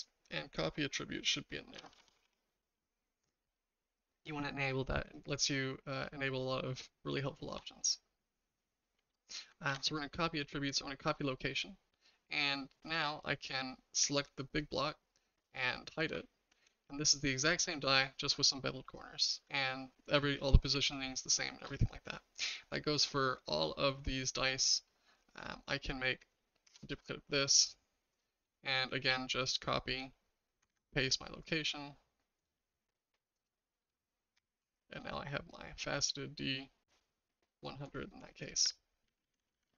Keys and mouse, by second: 7.2 shift+middle click, 9.7 ctrl+c, 12.4 click, 16.1 h, 16.7-19.3 shift+middle drag, 20.5-21.6 shift+middle drag, 24.6 middle click, 25.5 click, 26.7 shift+d, 29.7 shift+click, 30.7 ctrl+c, 33.3 click, 34.3 h, 35.0-37.8 shift+middle drag, 37.4 h, 39.1 ctrl+z, 39.2 ctrl+z, 39.4 ctrl+z, 39.5 ctrl+z, 39.7 ctrl+z.